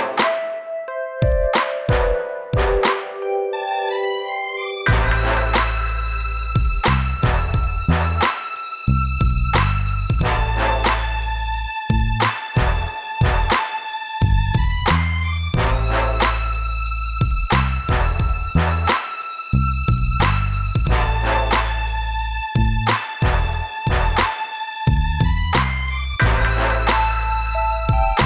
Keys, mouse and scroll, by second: 5.0 click, 5.1 click, 6.5 click, 9.1 click, 9.2 click, 10.2 click, 13.3 click, 13.4 click, 13.6 click, 14.2 double click, 15.3 click, 17.9 scroll down 2, 19.5 click, 19.5 click, 20.4 click, 26.7 shift+Return, 27.7 middle click.